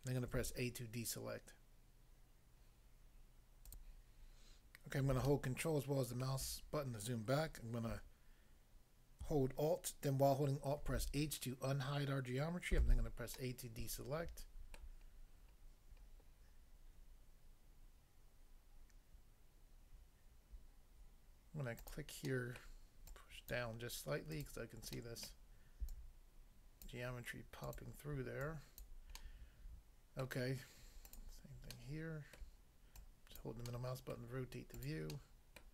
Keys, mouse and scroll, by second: 0.3 a, 3.6 click, 3.8 click, 5.2 ctrl+middle click, 10.8 alt+h, 12.8 a, 13.4 middle click, 14.8 middle click, 15.1 scroll up 1, 21.8 click, 21.9 click, 22.3 middle click, 22.6 middle click, 23.0 click, 23.5 click, 24.4 click, 25.0 middle click, 25.3 middle click, 25.9 click, 26.8 click, 27.7 click, 27.8 click, 28.4 click, 28.8 click, 29.2 middle click, 30.2 middle click, 31.0 click, 31.2 click, 31.7 middle click, 32.4 middle click, 33.0 click, 33.4 click, 34.1 middle click, 34.8 click, 34.9 click, 35.2 middle click, 35.6 middle click.